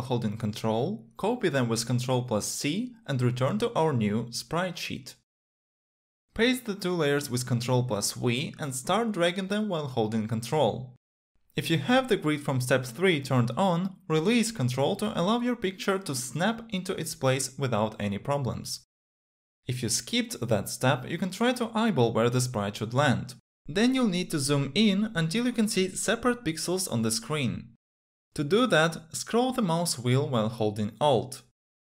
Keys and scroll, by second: 2.6 ctrl+c, 8.2 ctrl+v.